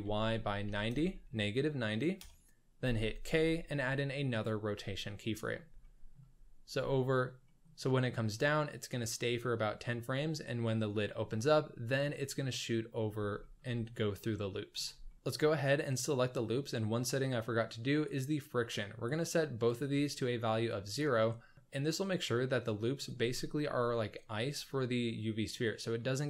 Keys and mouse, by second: 3.2 k, 5.2 middle click, 5.3 drag, 5.8 shift+drag, 7.4 middle click, 13.4 shift+middle drag, 15.0 shift+middle drag, 18.1 click, 19.7 click, 20.7 click.